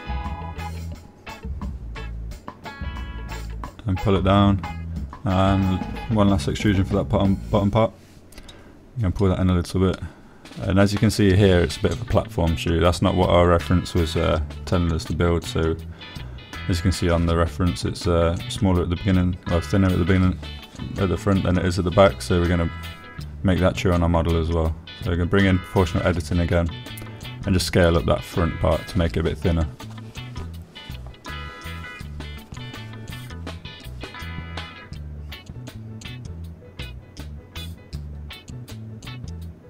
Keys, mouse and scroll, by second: 0.1 z, 1.8 click, 2.4 e, 4.3 click, 4.6 s, 6.0 click, 6.6 shift+click, 11.1 shift+click, 11.8-14.6 drag, 14.6 middle click, 16.5 click, 17.3 shift+middle click, 18.2 click, 20.8 o, 21.8 g, 22.1 z, 28.0 click, 29.5 click, 30.7 g, 31.1 z, 33.1 click, 33.9 click, 34.3 g, 34.4 z, 36.2 click, 37.8 click, 38.8 g, 38.9 z.